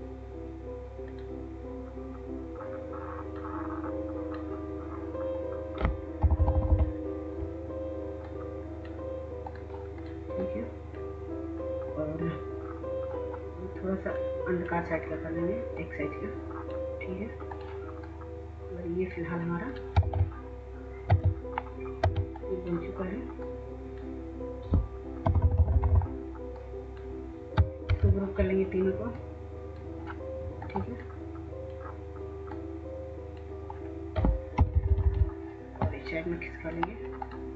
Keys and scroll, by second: 6.6 Up, 21.2 shift+w, 22.1 w, 25.4 Down, 25.5 Down, 28.0 ctrl+g, 34.6 Left, 34.7-35.7 Left.